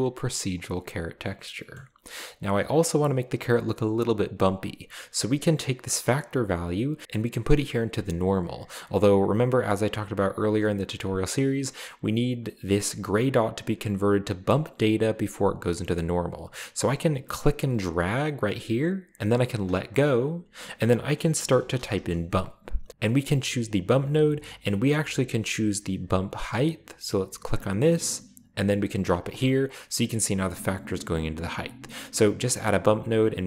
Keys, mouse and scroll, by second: 0.7 click, 1.5 middle click, 4.4 drag, 7.0-17.1 drag, 17.6-20.2 drag, 21.3-21.9 typing, 27.4 click, 28.0 click, 28.2 click, 29.3-29.7 drag, 32.4 click, 33.2-33.4 drag.